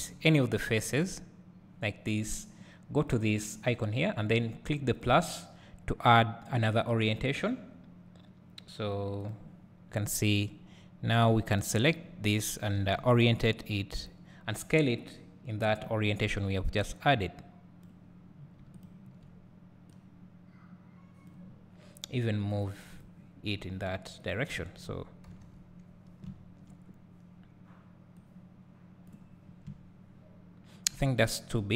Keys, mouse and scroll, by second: 0.9 3, 1.1 click, 5.0-9.5 drag, 11.6 alt+click, 13.0 s, 14.3 right click, 15.7 click, 17.0-18.8 drag, 20.0-22.6 drag, 23.1-24.3 drag, 23.7-24.3 scroll down 1, 28.4-31.7 drag.